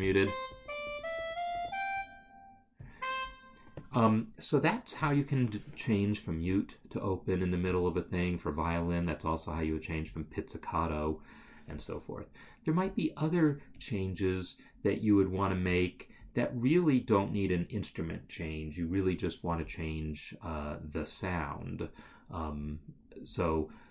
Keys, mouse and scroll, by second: 12.3-13.0 scroll, 13.0-14.6 scroll, 14.8-15.9 scroll, 22.8 scroll.